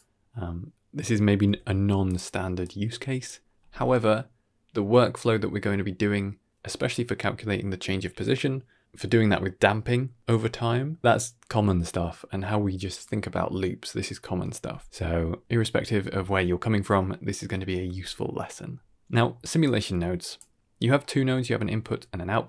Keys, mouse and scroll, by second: 1.4 s, 2.5 click, 18.0-18.4 middle drag, 19.0 middle click, 19.5-20.2 drag, 20.9 middle click, 21.2-21.6 ctrl+middle drag, 21.8 middle drag.